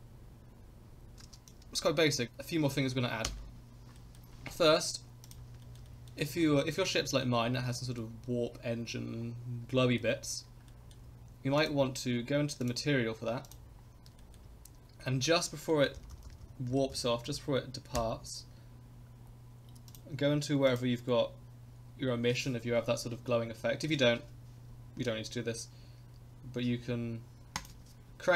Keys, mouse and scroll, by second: 1.2 space, 1.5-2.3 drag, 3.2 KP_0, 3.9-4.5 scroll up 3, 4.0 middle click, 5.3 click, 5.6 shift+middle click, 5.9 middle drag, 6.2 scroll down 1, 6.5 shift+middle drag, 6.8-7.2 middle drag, 7.4 scroll up 2, 7.7-8.0 middle drag, 9.7-10.0 middle drag, 10.7 middle drag, 11.0 scroll down 1, 11.6 click, 12.6 click, 13.4 click, 14.2 shift+middle click, 15.7 middle click, 16.0 Right, 16.1 Right, 16.3 Right, 16.4 Right, 16.7 Left, 16.9 Left, 17.3 Left, 18.0 Right, 19.2 scroll down 3, 19.9 click, 20.7 click, 27.5-28.3 drag.